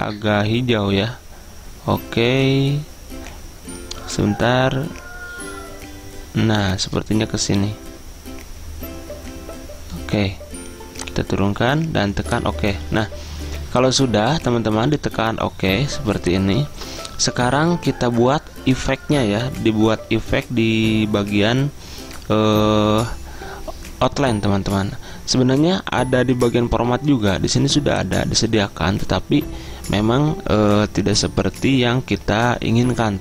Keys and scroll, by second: 16.8 ctrl+a.